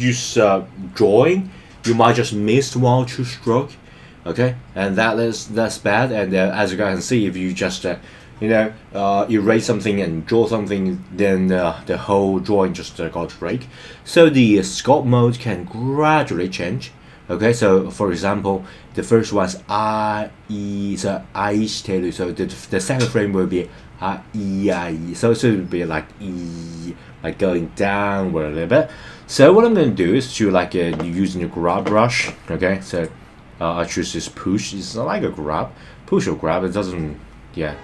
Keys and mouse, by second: 33.0 click.